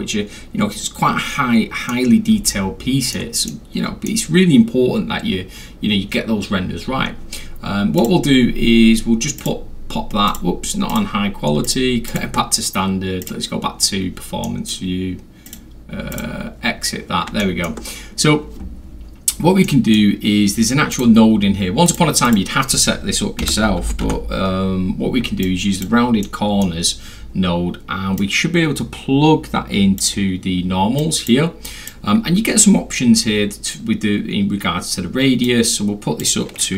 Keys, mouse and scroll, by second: 2.5 alt+middle click, 3.5-4.1 alt+middle drag, 8.0 click, 9.4 click, 10.3 click, 10.9 click, 11.7 click, 12.1 click, 13.2 click, 14.4 middle click, 15.5 click, 16.1 click, 17.4 alt+middle click, 19.3 middle click, 19.3 scroll, 19.7 middle drag, 20.9 click, 21.9 click, 22.3 click, 23.4 r, 23.8 u, 24.0 n, 25.4-25.8 drag, 26.2-26.6 middle drag, 26.2 scroll, 28.2-30.0 drag, 31.0 click, 31.7 click, 35.5 click.